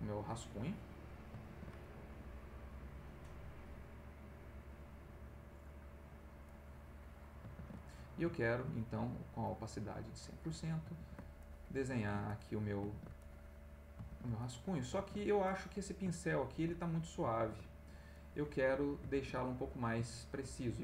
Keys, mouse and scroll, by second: 0.3 click, 1.5 ctrl+z, 3.3 click, 3.9 right click, 4.7 click, 6.1 click, 6.4 click, 7.5 ctrl+z, 7.9 ctrl+middle click, 9.4 click, 10.2 click, 11.0 ctrl+z, 11.4 ctrl+click, 12.0 ctrl+z, 12.3 ctrl+click, 12.8 ctrl+z, 13.2 ctrl+click, 14.1 ctrl+z, 14.4 ctrl+click, 15.0 ctrl+z, 15.5 ctrl+click, 16.2 ctrl+middle click, 17.3 ctrl+z, 18.1 click, 19.1 ctrl+z, 19.6-20.6 ctrl+middle drag.